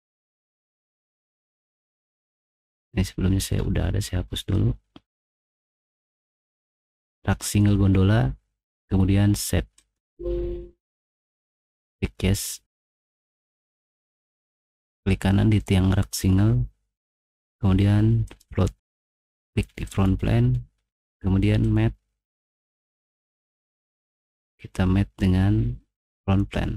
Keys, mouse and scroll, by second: 3.4 right click, 5.6 click, 9.7 click, 11.8 click, 15.1 right click, 18.2 click, 19.8 click, 21.6 click, 24.0 click, 26.2 click.